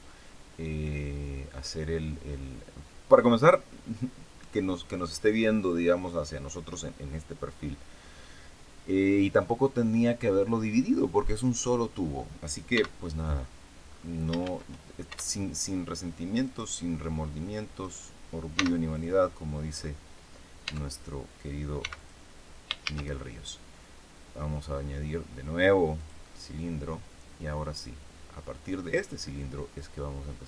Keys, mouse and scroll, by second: 12.7 x, 13.0 click, 13.8-14.1 scroll down 2, 14.4 shift+a, 16.4 right click, 17.8 right click, 18.5 x, 18.8 click, 19.6-20.0 scroll up 2, 20.6 Tab, 21.8 x, 21.9 click, 22.8 shift+a, 25.9 click, 27.8-29.2 drag, 29.7-30.4 drag.